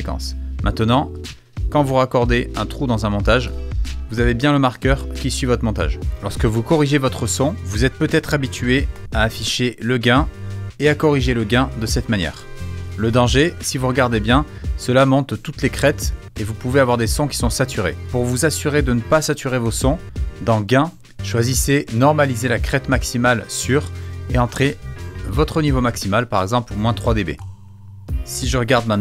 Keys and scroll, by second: 3.4 BackSpace, 8.9 g, 11.7 4, 12.3 Home, 13.4 =, 15.4 =, 16.3 -, 18.0 super+z, 19.6 g, 25.4 3, 28.6 =.